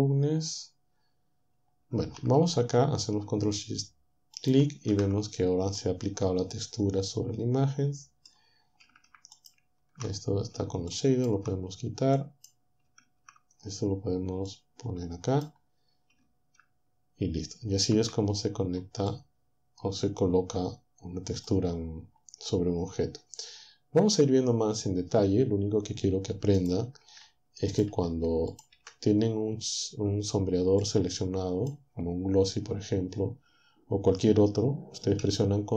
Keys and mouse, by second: 4.4 ctrl+shift+click, 5.8-8.6 drag, 9.4 ctrl+shift+click, 10.9 ctrl+click, 12.2 click, 14.5-15.6 drag, 19.2 click, 19.8-21.6 middle drag, 26.6 click, 27.0 Delete, 27.9 Delete, 28.8 Delete, 31.3 click.